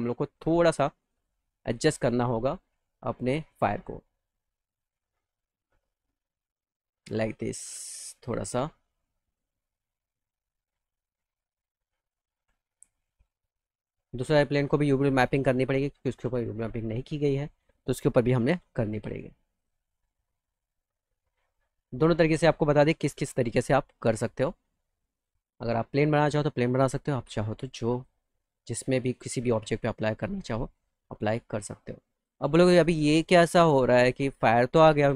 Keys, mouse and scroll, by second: 1.0 click, 4.6 click, 5.8-7.0 drag, 9.0 click, 10.9 click, 11.6 alt+middle click, 12.5 click, 13.9 click, 14.4 click, 14.9 click, 15.3 middle click, 16.7 click, 17.4 click, 18.4 u, 19.4 click, 20.5 click, 22.6-25.1 drag, 26.1-27.5 drag, 27.8 click, 28.9 click, 30.6-32.1 drag, 32.3-33.8 alt+middle drag, 34.5 alt+middle click.